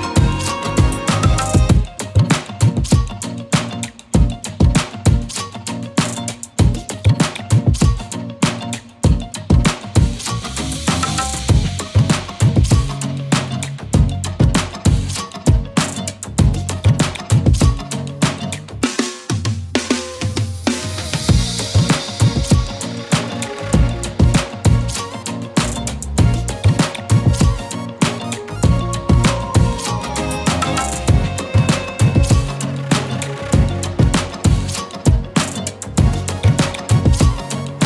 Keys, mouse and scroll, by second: 17.4-19.8 typing, 17.6 click, 18.7 click, 19.3 click, 19.6 click, 19.9 click, 23.5 ctrl+c, 24.5 ctrl+v, 26.0 shift+click, 32.7-35.2 alt+shift+click, 35.6 z, 35.9 click, 36.0 space, 36.2 click.